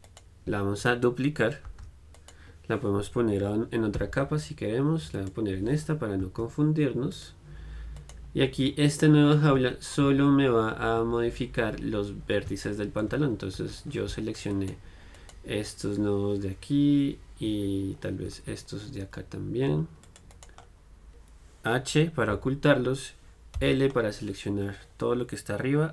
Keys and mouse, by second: 1.9 shift+d, 2.5-5.4 drag, 4.2 m, 7.3 click, 8.2-9.8 right drag, 9.8 Tab, 10.2 z, 11.2 z, 13.8 z, 14.7-18.3 right drag, 18.3-20.6 middle drag, 18.6 c, 20.6-23.8 right drag, 23.8 h, 23.8 l.